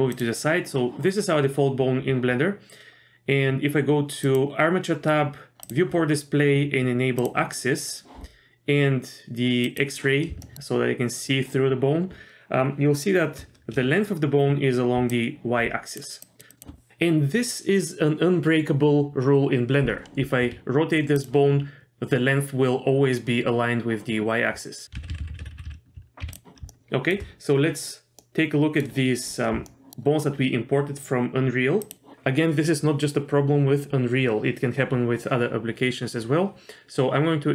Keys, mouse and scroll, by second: 4.2 click, 5.6 click, 5.9-7.2 scroll down 1, 7.2 click, 7.8 middle click, 9.6 click, 10.4 shift+middle click, 12.5 scroll up 1, 15.0-16.6 typing, 15.1 click, 16.2 click, 16.5 click, 20.4 r, 24.8 x, 25.0 ctrl+z, 25.1 ctrl+z, 25.2 ctrl+z, 25.3 ctrl+z, 25.4 ctrl+z, 25.5 ctrl+z, 25.6 ctrl+z, 26.2 x, 26.7 shift+middle click, 28.2 middle click, 29.1-29.5 scroll up 1, 29.7 shift+middle click, 29.9-30.6 scroll up 5, 31.8 click.